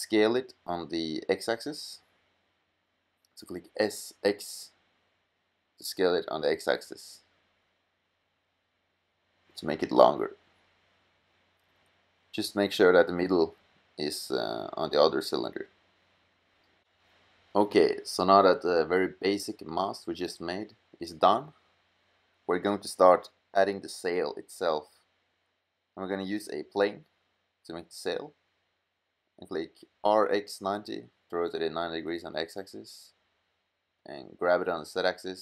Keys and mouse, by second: 1.1 s, 2.0 click, 2.6-3.2 middle drag, 3.2 click, 5.8 s, 17.4-17.8 middle drag, 18.0 middle drag, 18.4 middle click, 18.7-19.3 middle drag, 29.0 r, 32.3 g.